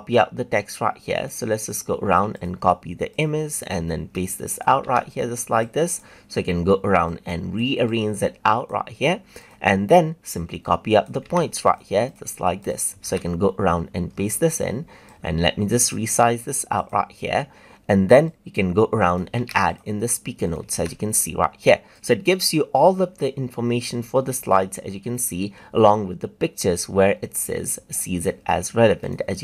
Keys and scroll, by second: 4.8 ctrl+v, 11.2 ctrl+c, 13.0 ctrl+v, 19.3 ctrl+c, 20.7 ctrl+v.